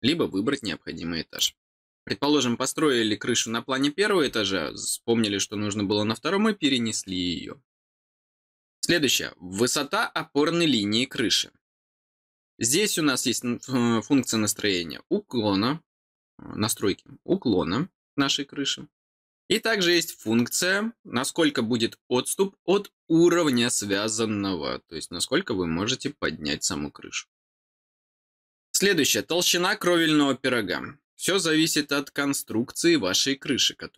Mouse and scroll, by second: 1.3 click, 19.9 click.